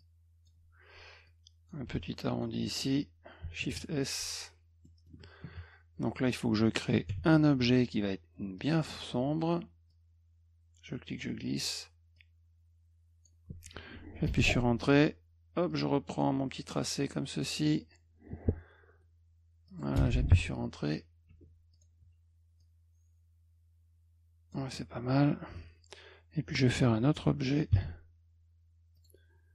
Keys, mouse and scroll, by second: 0.0 shift+click, 1.3 shift+click, 2.1 shift+click, 2.6 click, 3.7 s, 4.2 F1, 4.8 middle click, 7.1 b, 8.6 click, 9.9 click, 12.2 click, 14.3 Return, 15.7 click, 16.8 click, 19.7 click, 21.3 F2, 21.7 click, 22.6-24.5 drag, 27.8 b, 29.0 click.